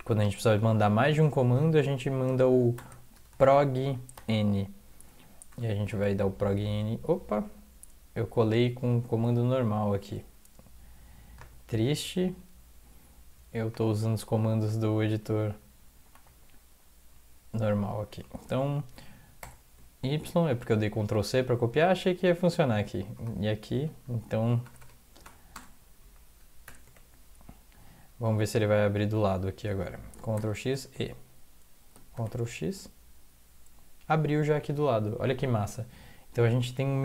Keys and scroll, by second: 0.5 Return, 4.1 typing, 5.5 Return, 6.2 ctrl+v, 9.3 ctrl+z, 14.9 Up, 15.1-16.8 Up, 16.8-17.1 Down, 17.4 Up, 17.6 Up, 17.8 Up, 18.1 Right, 18.5 Right, 19.4 ctrl+y, 22.4 Down, 23.2 Return, 24.8 BackSpace, 25.2 BackSpace, 25.5 Return, 26.0 Down, 26.7 Home, 26.9 Tab, 27.9 Down, 28.1 Down, 29.2 Up, 29.4 Up, 29.7 Down, 30.4 ctrl+x, 30.7 ctrl+e, 32.2 ctrl+x.